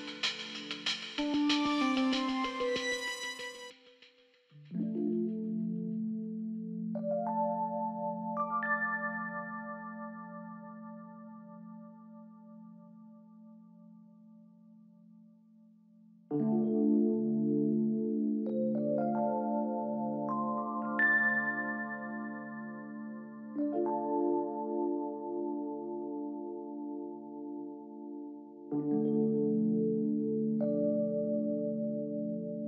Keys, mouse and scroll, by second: 0.1 click, 2.5-4.8 drag, 5.6-5.9 drag, 9.9 click, 12.0-13.8 typing, 16.5 ctrl+z, 27.2 double click, 27.4 double click, 27.7 double click, 27.9 double click, 28.3 double click, 31.9-32.6 typing.